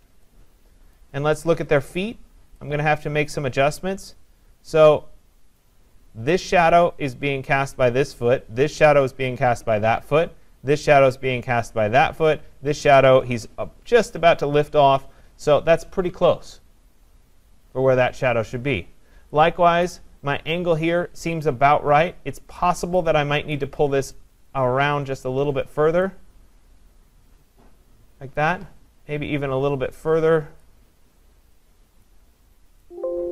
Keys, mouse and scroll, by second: 0.1 scroll, 0.8 scroll, 1.0 click, 3.5-4.2 scroll, 5.6 click, 19.8-23.4 click, 23.5 click, 25.2 click, 28.4 click, 30.6 click, 32.1 click.